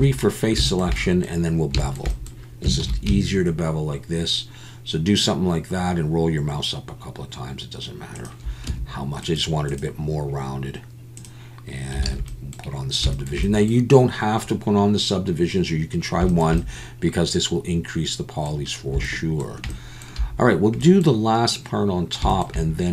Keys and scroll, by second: 2.8 ctrl+b, 8.7 Tab, 12.0 alt+a.